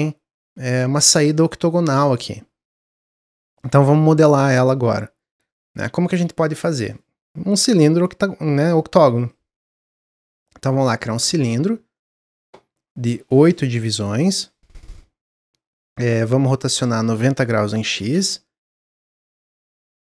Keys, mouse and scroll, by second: 9.1-11.5 drag, 11.5-11.9 scroll down 1, 11.9-13.0 middle drag, 13.0-16.0 drag, 16.9-19.9 drag.